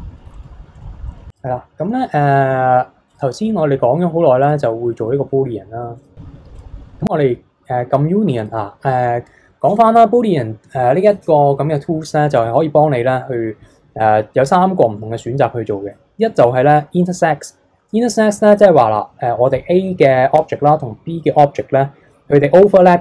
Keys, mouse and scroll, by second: 0.3 middle drag, 0.6 scroll up 2, 0.7 middle click, 0.9 scroll down 3, 1.1 middle drag, 1.3 click, 3.1-8.1 drag, 8.4-11.5 drag.